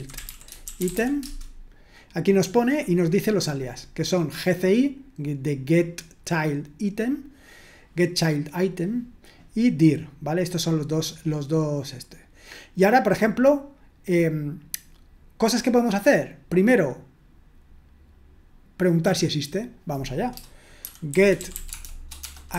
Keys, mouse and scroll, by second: 0.0-1.5 typing, 11.1-12.5 scroll down 1, 12.5 scroll down 1, 12.8-19.1 drag, 19.6 click, 20.9-22.5 typing.